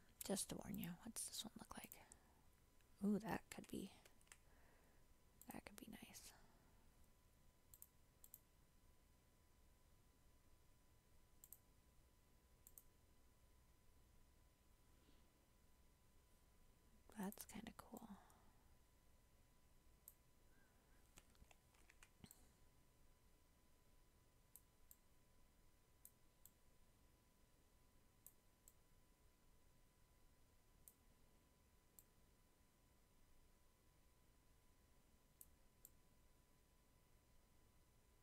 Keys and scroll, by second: 4.1 ctrl+z, 21.8 ctrl+t.